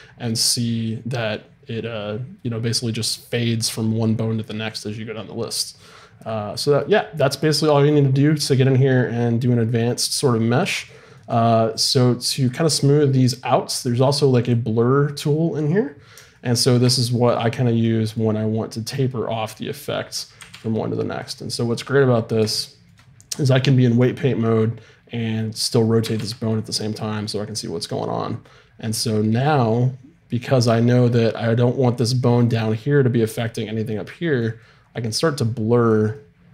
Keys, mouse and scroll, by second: 12.0-13.2 middle drag, 13.2-15.3 drag, 17.8-19.5 middle drag, 20.4 r, 22.5 middle click, 26.0 r, 34.0 middle click, 35.9 click.